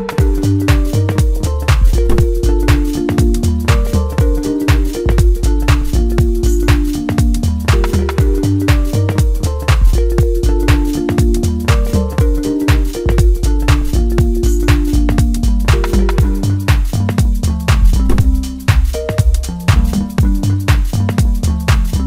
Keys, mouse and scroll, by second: 1.1 scroll down 3, 1.7-2.6 scroll down 2, 2.9-3.9 scroll down 1, 4.0-5.1 drag, 5.1 scroll down 2, 5.8 click, 6.8-8.2 drag, 11.8 KP_0, 13.4-16.8 scroll down 10, 16.8-22.0 drag.